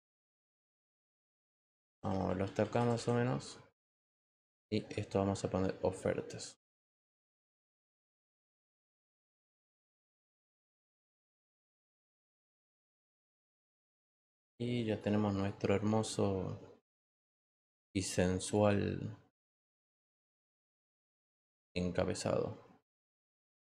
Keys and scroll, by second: 9.3 t, 11.9-13.7 typing.